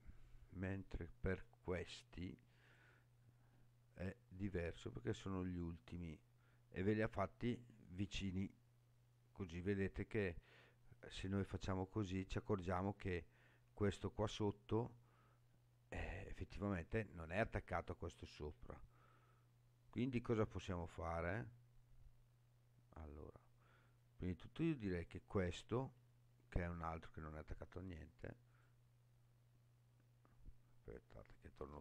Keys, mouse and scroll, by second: 1.3 right click, 2.6 click, 4.3 g, 5.8 right click, 6.8 click, 8.1 g, 23.9 right click, 25.1 click, 25.8 g, 28.5 click, 31.6 ctrl+z.